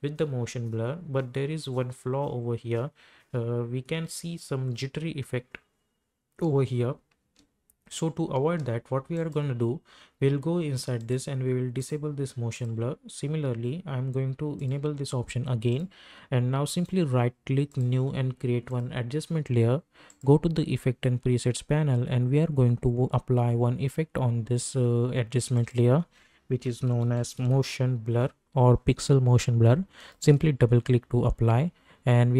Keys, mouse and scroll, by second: 7.2 space, 9.1 click, 16.8 right click, 17.7 click, 25.5 click, 26.5-28.0 typing, 30.0 click.